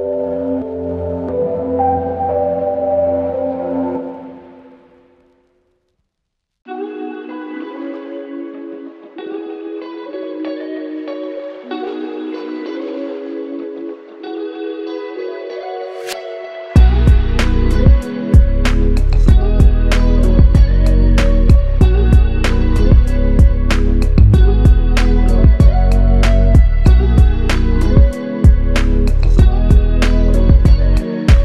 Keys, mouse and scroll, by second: 14.4 alt+click, 17.1 alt+shift+click, 20.3 double click, 25.2 typing.